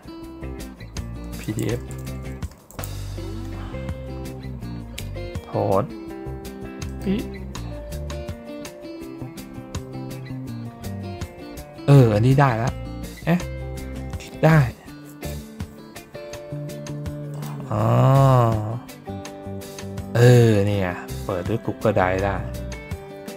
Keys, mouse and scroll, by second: 4.3 middle click, 6.9 click, 11.0 middle click, 17.3 click.